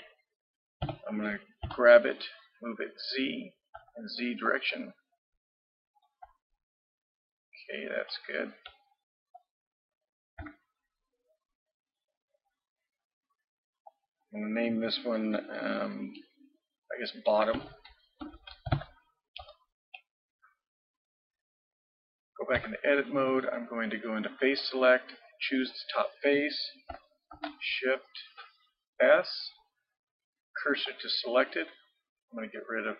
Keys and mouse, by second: 0.8 g, 9.0-10.4 middle drag, 10.4 Tab, 12.2-15.9 drag, 18.4 t, 22.6 Tab, 23.6-24.6 middle drag, 24.6-25.9 drag, 27.3 click, 27.4 shift+s.